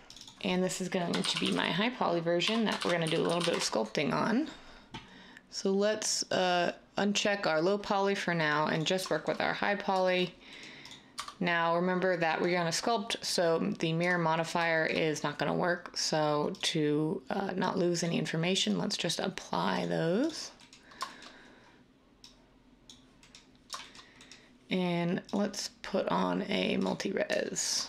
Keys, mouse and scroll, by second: 1.2-1.5 typing, 2.8-3.4 typing, 3.5 Return, 7.7 typing, 11.1 Tab, 14.0 Tab.